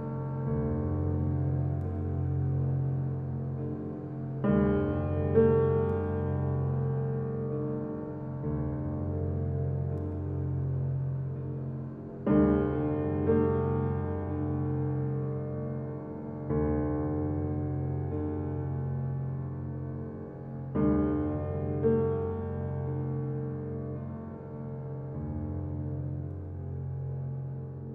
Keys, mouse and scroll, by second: 0.1 right click, 1.4 k, 1.5 click, 4.6-7.8 right drag, 7.8 click, 13.2 right click, 14.5 click, 17.3-18.2 scroll down 1, 19.5 click, 22.1 scroll up 1, 22.7 alt+click, 23.5 alt+right click, 23.9 click, 24.4 alt+middle click, 25.0 click.